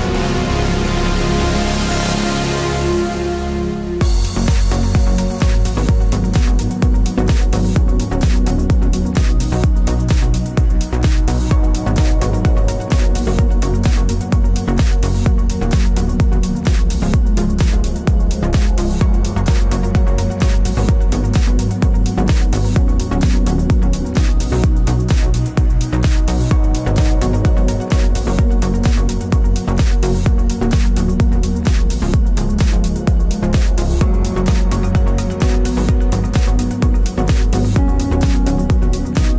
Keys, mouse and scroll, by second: 0.0 scroll up 2, 0.1 shift+middle click, 0.6 click, 0.8 alt+d, 2.4 scroll down 2, 2.6 shift+middle click, 3.3 scroll up 1, 3.6 click, 4.0 alt+d, 4.6 click, 4.7 scroll up 1, 5.7-7.0 scroll down 2, 7.0 middle click, 7.6-9.0 scroll down 2, 9.0-10.2 middle drag, 10.2 click, 10.2 Tab, 10.6 click, 11.1 2, 11.2 click, 11.6 ctrl+click, 12.0 click, 12.6 ctrl+click, 13.0 shift+d, 13.1 Return, 13.5 Tab, 13.8 click, 14.2 Tab, 14.4 a, 14.7 middle click, 15.6 scroll up 1, 15.8 scroll down 1, 16.1 Tab, 16.3 x, 16.4 click, 16.5 Tab, 16.8 click, 17.1 ctrl+click, 17.5 shift+d, 17.6 Return, 18.0 Tab, 18.3 click, 18.4 Tab, 19.2-20.5 drag, 20.5 a, 22.1-23.1 scroll up 3, 22.2-23.7 shift+middle drag, 23.1 ctrl+a, 23.7 click, 24.0 Tab, 25.1 a, 26.0 click, 26.4 shift+click, 27.0 e, 27.9 click, 28.2 shift+click, 28.5 1, 28.7 click, 29.6 a, 30.3 Escape, 30.6 click, 31.2-33.4 drag, 31.5 ctrl+z, 33.1 1, 34.0 e, 35.4 Tab, 35.5-36.6 middle drag, 35.9 KP_Decimal, 36.6 click, 36.9-39.3 middle drag, 37.5 ctrl+z, 38.3 shift+Tab, 38.7 scroll up 2, 39.1 a.